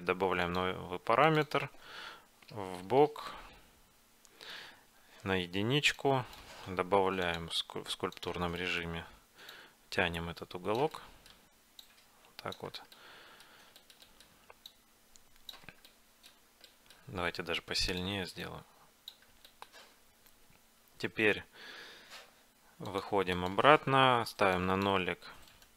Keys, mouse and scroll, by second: 0.6 middle click, 1.2-3.4 drag, 6.1-7.4 drag, 8.4 click, 8.7-10.1 middle drag, 10.1 click, 10.2 middle click, 10.3 click, 10.4 middle click, 10.7 click, 10.8 middle click, 10.9 click, 11.1 middle click, 12.0-13.8 middle drag, 14.8-16.5 middle drag, 16.7 middle click, 17.7 f, 18.0-20.2 drag, 20.0 middle click, 20.2 middle click, 23.0-25.7 drag, 25.6-25.7 right drag.